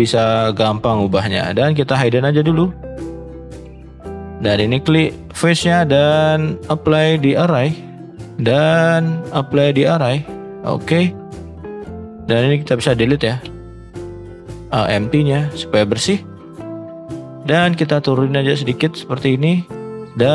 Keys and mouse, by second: 1.9 click, 2.5 shift+middle drag, 3.1 middle click, 3.5 shift+middle click, 4.0 shift+middle click, 5.1 middle click, 6.6-7.3 drag, 9.2-9.8 drag, 10.5 middle click, 11.7 click, 13.4 Delete, 13.9-14.3 middle drag, 15.3 Delete, 15.6 middle drag, 16.3 middle click, 16.9 drag, 17.2 middle click, 18.2-19.5 drag.